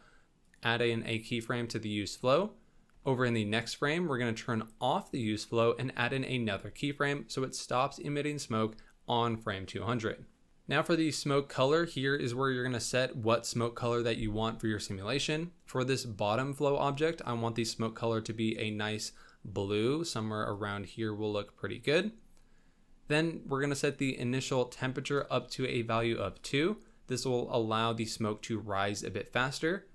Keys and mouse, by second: 0.4 click, 2.9 Right, 5.9 click, 11.5 click, 23.9-26.5 drag.